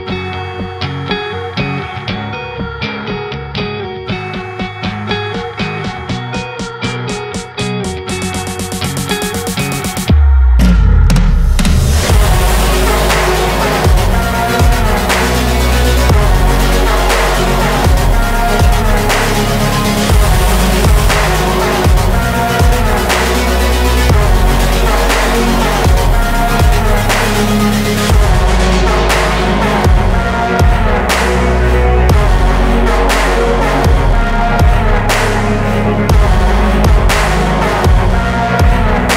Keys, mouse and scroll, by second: 0.5 KP_Decimal, 1.1 BackSpace, 1.3 Right, 3.6 Tab, 3.9 ctrl+c, 4.1 ctrl+v, 4.1 g, 4.8 click, 5.0 Tab, 5.6 BackSpace, 6.3 Right, 6.8 Right, 6.9 /, 7.7 BackSpace, 7.8 BackSpace, 7.9 Tab, 8.5 r, 9.4 click, 10.0 ctrl+c, 10.1 ctrl+v, 10.2 g, 10.8 shift+middle click, 11.1 click, 11.3 Tab, 12.4 Delete, 12.5 Delete, 12.6 Tab, 13.0 r, 13.9 s, 15.2 click, 15.6 Tab, 16.2 Delete, 16.4 BackSpace, 17.1 Right, 17.3 Delete, 17.8 BackSpace, 18.3 ctrl+z, 19.1 Left, 19.4 Down, 19.9 Tab, 20.3 r, 20.7 s, 22.3 click, 22.6 g, 23.3 click, 23.6 click, 24.5 click, 24.7 ctrl+c, 24.8 ctrl+v, 25.0 g, 25.6 r, 26.1 g, 26.7 Tab, 27.0 Tab, 27.1 click, 27.7 Tab, 27.9 s, 29.0 click, 29.2 s, 30.1 click, 30.3 g, 31.2 Left, 31.4 r, 31.9 g, 32.6-33.0 scroll down 2, 33.0 KP_0, 33.4 scroll up 3, 33.6 shift+middle drag, 33.9 click, 34.1 shift+drag, 34.3 shift+drag, 34.5 shift+drag, 34.7 g, 36.5 drag, 36.7 click, 36.9 g, 37.6 r, 38.5 drag, 38.8 shift+drag, 39.0 shift+drag.